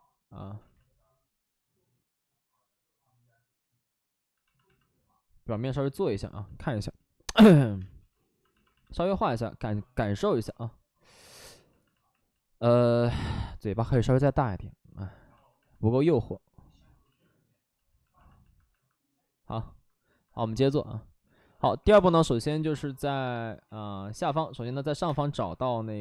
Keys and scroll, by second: 0.5 ctrl+z, 4.0 ctrl+z, 7.7 space, 13.8 5, 16.9 ctrl+z, 21.7-22.4 typing, 23.6 ctrl+z, 24.2-25.2 typing.